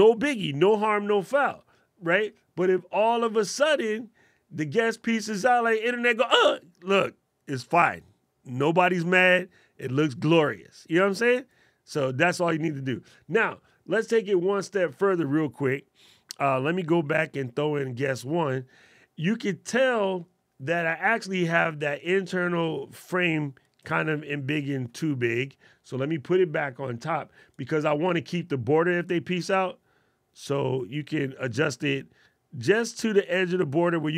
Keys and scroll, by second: 23.7 super+z, 24.4 super+z.